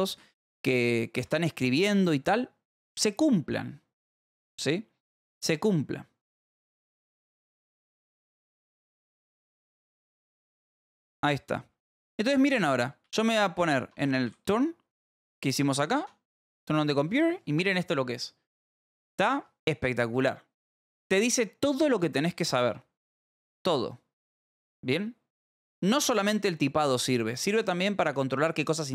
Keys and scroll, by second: 0.0-1.2 typing, 2.4 ctrl+s, 7.8 ctrl+s, 8.3-11.9 typing, 14.2 t, 15.1 s, 16.8 shift+k.